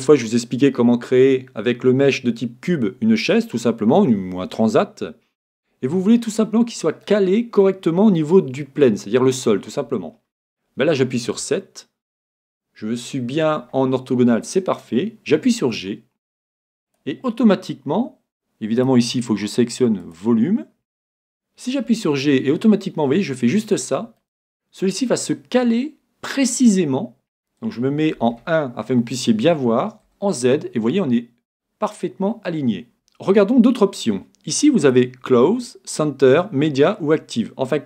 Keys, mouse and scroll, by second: 7.1-8.9 middle drag, 15.5 g, 17.1-20.7 drag, 21.9 g, 23.9-25.6 drag, 24.2-26.1 middle drag, 26.7-28.3 scroll up 1, 28.6-28.9 scroll up 1, 30.1 z, 30.7-31.1 scroll up 1, 31.8-33.7 middle drag, 34.9-36.7 drag.